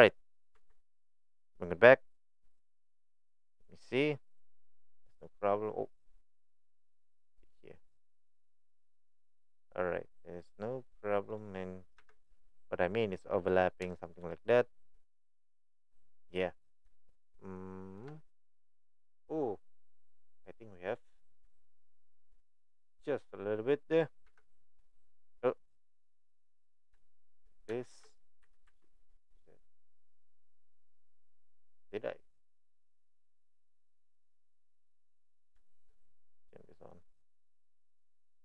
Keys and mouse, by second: 0.6 Tab, 2.4 click, 2.8 click, 4.4 click, 7.4 click, 7.9 middle click, 8.9 click, 10.2-11.3 middle drag, 12.0 KP_1, 13.9-14.9 shift+middle drag, 17.0-18.0 shift+middle drag, 21.6-22.2 shift+middle drag, 23.1 middle click, 24.3 KP_1, 25.7-26.1 right drag, 27.0-27.4 shift+middle drag, 27.8 shift+middle click, 28.4 g, 34.8 middle click, 36.9 click, 37.6 middle click.